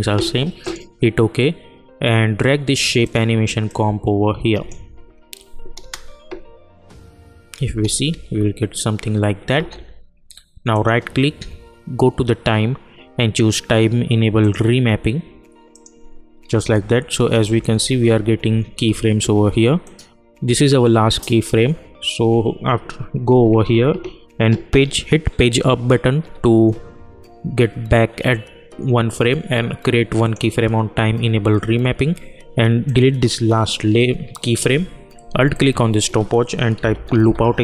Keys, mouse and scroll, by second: 0.6 click, 3.0 click, 3.9 click, 5.8 space, 7.7 space, 10.7 right click, 14.4 click, 16.2-19.6 typing, 19.8-24.5 drag, 26.6 Page_Up, 30.2 click, 32.8 click, 35.5 alt+click, 36.5-37.6 typing.